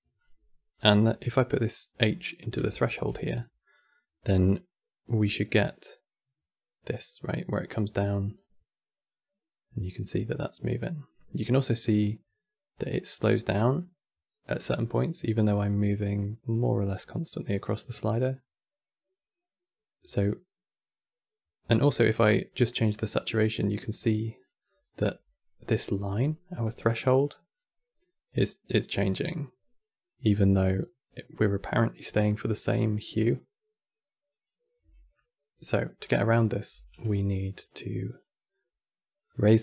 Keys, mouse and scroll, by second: 0.4 click, 2.0-2.6 middle drag, 2.6 ctrl+shift+click, 3.3-4.1 middle drag, 4.1 click, 24.5-25.0 scroll up 5, 25.0-26.3 shift+middle drag, 26.3 click, 35.7 click, 36.5 q, 37.8-39.6 drag.